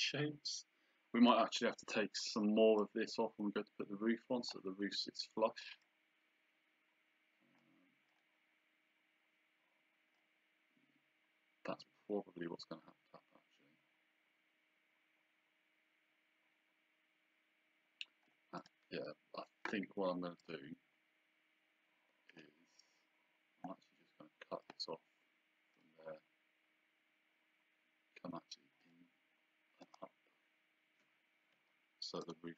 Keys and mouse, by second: 0.0 click, 2.8 click, 5.8 click, 8.1 click, 10.2 click, 18.6 click, 20.4 click, 22.3 click, 24.6 click, 25.7 click, 28.9 click, 31.5 Escape, 32.2 right click.